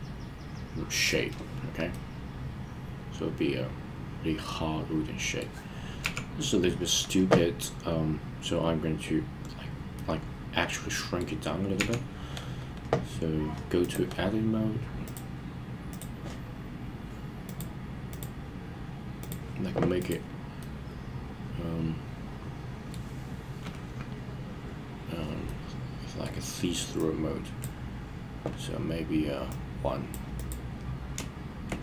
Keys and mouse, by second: 1.9-5.5 middle drag, 6.0 KP_3, 9.9-11.2 middle drag, 11.8 KP_3, 13.8 click, 15.1-16.0 drag, 17.5 click, 20.0 click, 20.6-23.0 middle drag, 25.5-26.2 middle drag, 27.0 click, 29.5 click, 30.4 click.